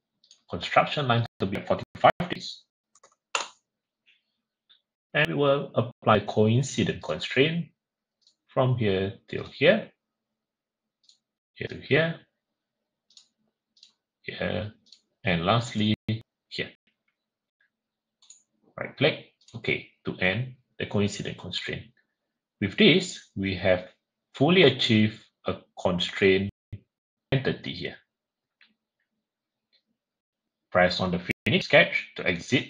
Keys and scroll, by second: 2.7-3.2 typing.